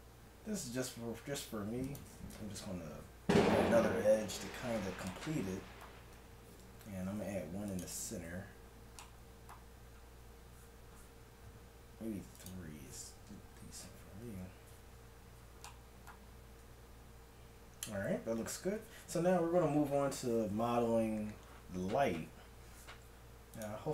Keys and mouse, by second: 2.4 Tab, 6.1 Tab, 7.0 ctrl+r, 8.2 Tab, 12.3-14.1 drag, 14.3 KP_1, 16.7 Tab, 18.5 KP_1.